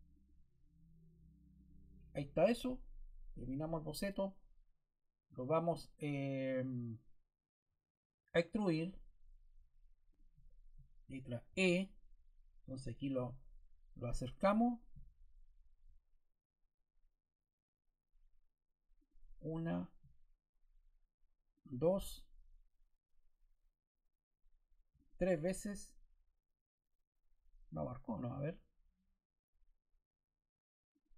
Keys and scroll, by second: 11.4 e.